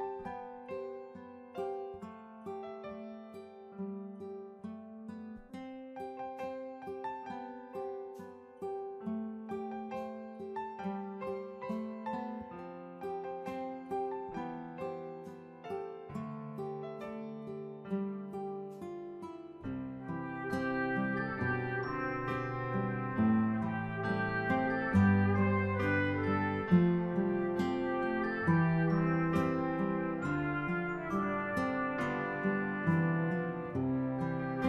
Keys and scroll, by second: 15.2 ctrl+=, 25.1-26.0 typing, 31.0 ctrl+z.